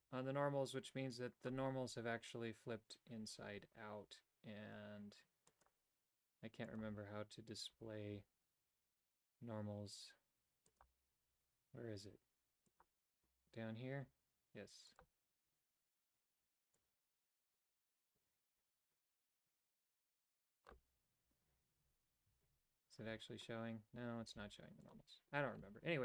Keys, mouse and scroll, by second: 5.5-6.8 drag, 10.7-11.8 drag, 12.7-21.5 drag, 22.4 Tab, 23.1 Tab, 24.4 g.